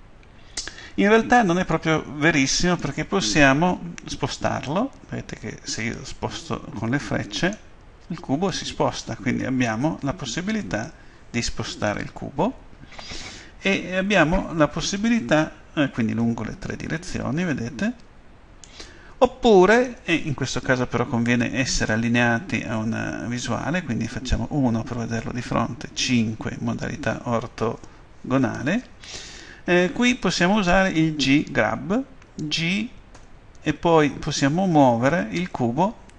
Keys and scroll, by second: 26.0 5, 33.1 g.